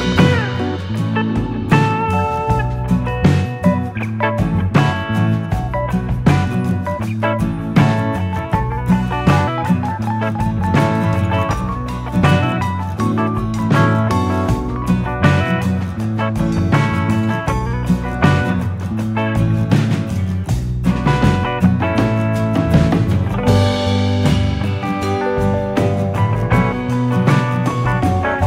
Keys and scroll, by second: 0.8 alt+[, 1.0-2.0 typing, 13.6 ctrl+z, 18.3 F9.